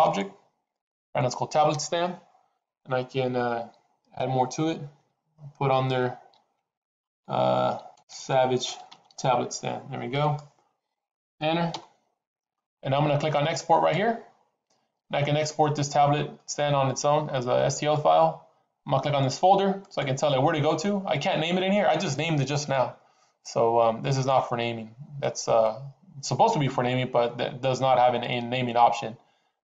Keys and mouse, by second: 13.6 click, 19.6 click.